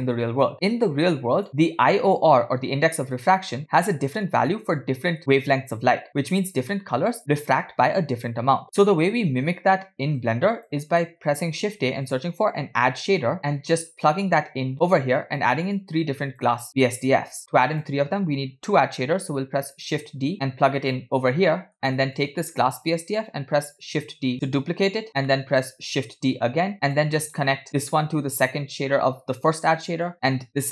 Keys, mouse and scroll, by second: 0.6 middle click, 1.4 click, 1.5 middle click, 1.5 scroll up 4, 2.1-3.3 drag, 8.6 scroll down 4, 8.8 middle click, 10.2 click, 11.0 middle click, 11.5 shift+a, 12.9 d, 14.7-15.4 drag, 15.8 click, 16.7 middle click, 17.4-17.9 drag, 20.3 shift+d, 21.5-21.9 middle drag, 22.2 click, 24.3 shift+d, 25.3 middle click, 26.3 shift+d, 27.2 middle click, 27.8-30.1 drag, 30.1 middle click, 30.3 scroll down 1.